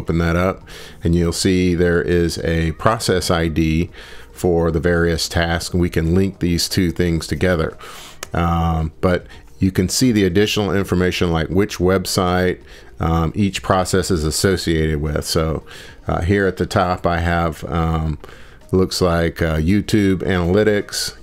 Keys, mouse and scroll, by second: 2.0 click, 3.2 click, 4.8 click, 12.0 click, 13.0 scroll, 14.3 scroll down 2, 17.8 click, 19.0 click.